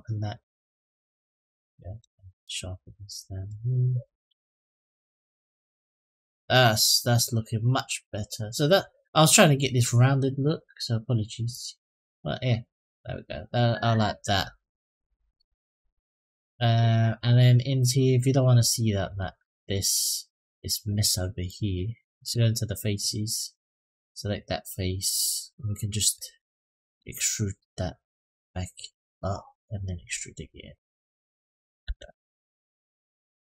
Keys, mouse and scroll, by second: 0.2-1.8 drag, 2.3-3.8 drag, 4.1 Tab, 4.5 click, 5.0-5.4 middle drag, 5.6 click, 11.3 click, 11.7 click, 12.0-13.8 middle drag, 14.3-15.1 middle drag, 15.5 click, 15.8 middle drag, 16.4-17.3 scroll up 2, 17.3-17.7 scroll up 1, 17.7-18.2 middle drag, 18.8 click, 19.2 Tab, 21.2 click, 22.0 click, 23.3 click, 25.9 click, 27.7-29.4 drag, 29.8-31.3 drag, 31.6 Tab, 32.0-32.6 middle drag, 32.9 click.